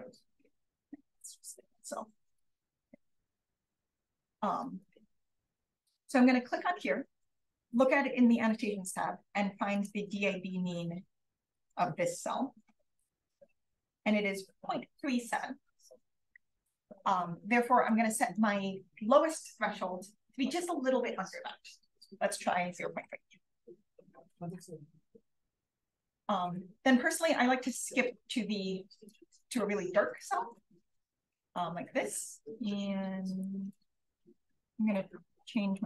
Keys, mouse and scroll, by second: 0.7-1.7 scroll down 1, 1.1 click, 1.7-2.3 scroll up 1, 2.3-3.3 drag, 2.3-3.3 scroll up 1, 3.3-3.9 scroll up 1, 3.9-4.5 scroll up 1, 4.5-5.0 scroll up 1, 9.7 click, 13.7-14.9 drag, 17.8 click, 22.4-23.8 typing, 26.7-28.1 scroll down 1, 27.3 click, 28.1-29.3 scroll up 1, 29.0-31.5 drag, 34.2 click.